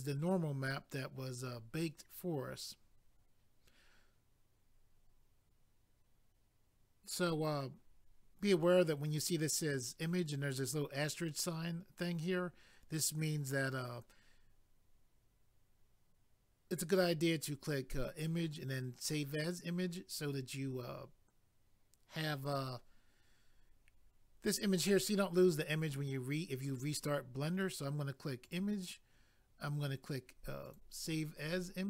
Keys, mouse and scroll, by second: 28.4 click, 28.5 click, 30.6 click, 30.7 click.